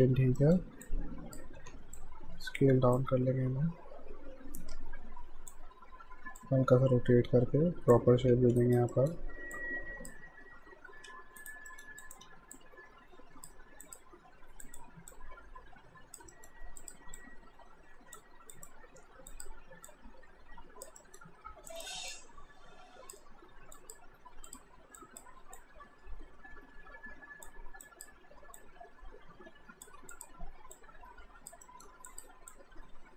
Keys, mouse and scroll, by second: 0.4 middle click, 0.9 click, 1.6 r, 2.0 click, 2.7 w, 3.0 click, 5.7 e, 6.4 click, 8.2 r, 8.6 alt+right click, 8.9 alt+middle click, 9.6 click, 11.1 q, 11.4 right click, 11.7 alt+middle click, 12.0 alt+click, 12.2 w, 12.6 click, 16.3 alt+middle click, 16.8 click, 21.0 alt+middle click, 21.7 click, 30.1 ctrl+click, 31.6 alt+middle click, 32.1 click.